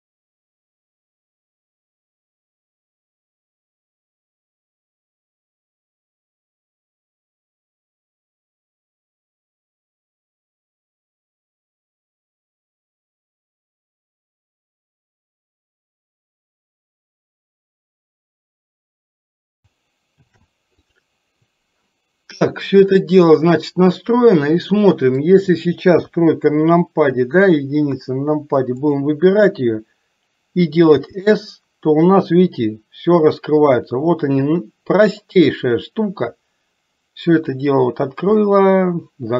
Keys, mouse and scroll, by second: 1.6 shift+click, 2.0 ctrl+shift+c, 2.8 click, 3.5 shift+click, 4.0 ctrl+shift+c, 5.0 click, 5.4 shift+click, 5.8 ctrl+shift+c, 6.4 click, 6.9 click, 7.2 shift+click, 7.6 ctrl+shift+c, 8.4 click, 8.7 click, 9.3 ctrl+shift+c, 10.0 click, 10.4 click, 10.8 shift+click, 11.1 ctrl+shift+c, 14.0 click, 15.0 click, 16.5 click, 17.3 shift+click, 18.0 ctrl+shift+c, 18.6 click, 21.1 ctrl+shift+c, 23.1 click, 24.4-25.6 middle drag, 26.1 KP_3, 28.0 KP_1, 28.9 click, 31.0 s, 38.6-39.3 middle drag.